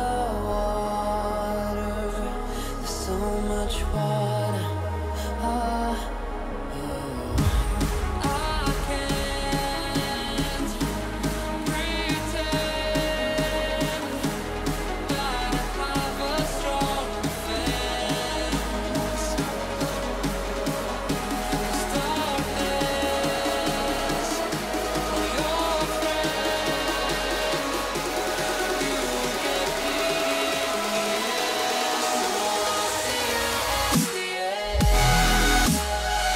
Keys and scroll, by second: 3.0 ctrl+e, 4.0 ctrl+alt+shift+e, 28.1 F2.